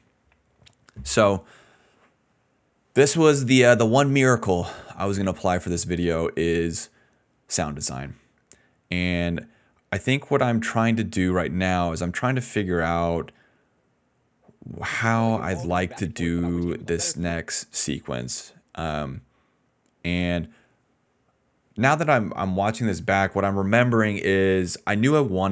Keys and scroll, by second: 14.8 space, 16.3 d, 17.2 space.